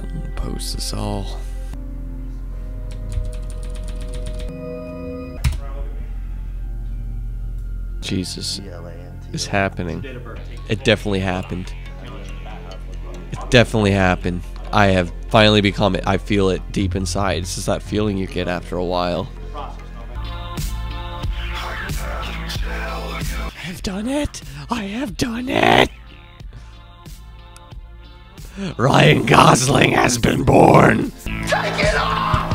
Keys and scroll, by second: 3.6 super+=, 3.8 super+=, 4.1 super+=, 5.3 BackSpace, 5.6 Return.